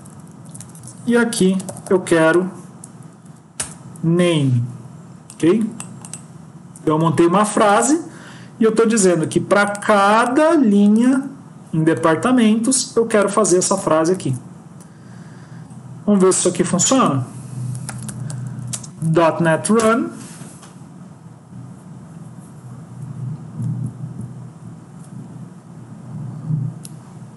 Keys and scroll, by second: 0.5 Right, 0.6 Right, 3.1 Up, 14.2 ctrl+s.